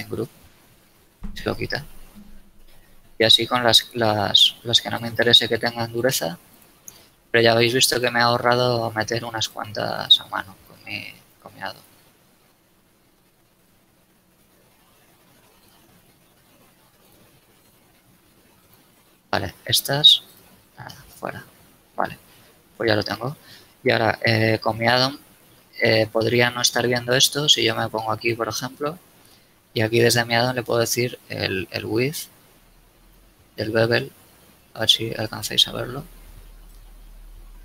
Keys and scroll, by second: 21.4 a, 23.7 Tab.